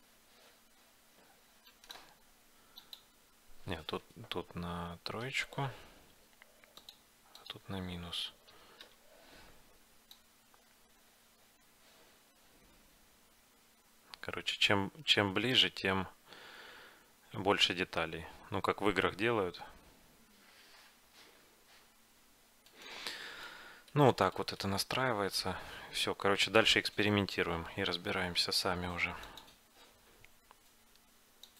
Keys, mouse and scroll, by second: 2.9-6.2 drag, 6.9-8.6 drag, 10.3-11.9 drag, 23.2-28.2 middle drag.